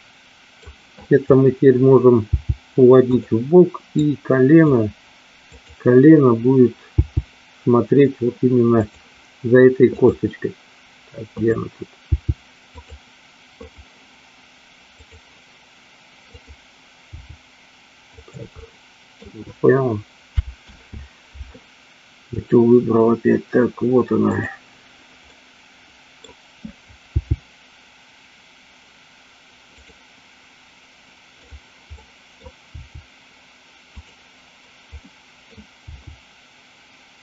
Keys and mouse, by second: 2.4 g, 4.0 click, 5.5 click, 7.0 g, 10.0 click, 12.1 g, 12.8 click, 13.8 click, 15.0 click, 16.4 click, 17.4 g, 18.8 middle click, 20.9 ctrl+z, 22.4 click, 24.4 click, 25.4-26.4 middle drag, 27.4 g, 29.9 click, 31.5 click, 32.1 middle click, 32.8 g, 34.1 click, 35.0 middle click, 35.9 g.